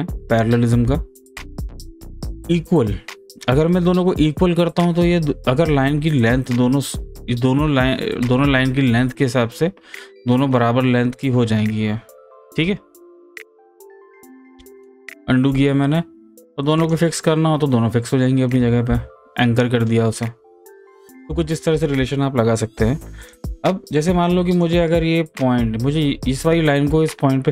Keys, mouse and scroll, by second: 0.8 click, 1.3 ctrl+z, 6.2 click, 11.2-13.4 drag, 13.4 ctrl+z, 14.9 ctrl+z, 16.8 click, 19.4 click, 21.1 z, 21.8 ctrl+z, 23.2 click.